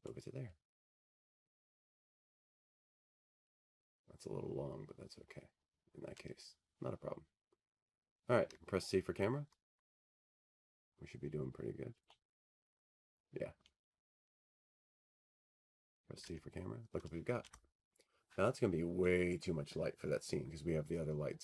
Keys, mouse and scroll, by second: 2.4 click, 5.6 click, 6.0-7.4 scroll, 7.4-8.1 scroll, 8.9 scroll, 16.7-19.0 scroll, 19.3-20.9 scroll, 21.3-21.4 scroll.